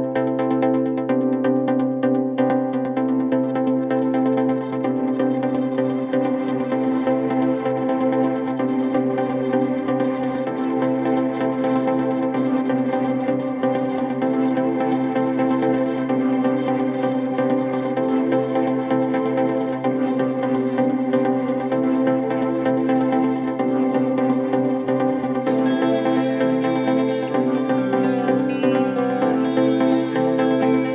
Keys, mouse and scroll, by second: 0.5 click, 1.8-3.2 typing, 3.2 Return, 4.8 click, 7.8 click, 11.2 click, 12.8 click, 14.9 click, 15.0-15.9 typing, 17.0 click, 19.7 click, 21.6 click, 22.8 2, 23.5 0, 23.9 0, 24.3 Return, 25.6 click, 27.1-27.5 typing, 28.5 click, 30.2 click.